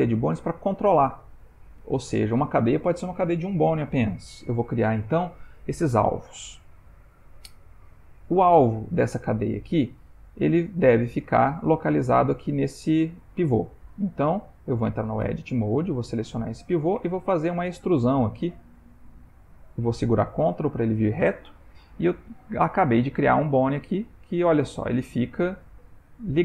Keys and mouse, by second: 15.4 Tab, 15.9 click, 17.0 e, 22.2 click, 22.6 g.